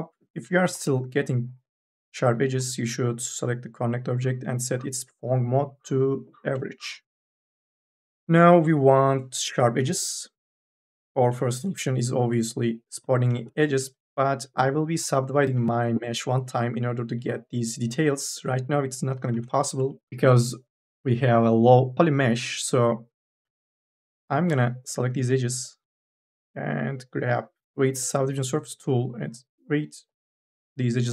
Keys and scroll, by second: 9.6 2, 11.1 k, 11.5 l, 19.1 n, 19.6 b, 24.2 2, 24.3 e.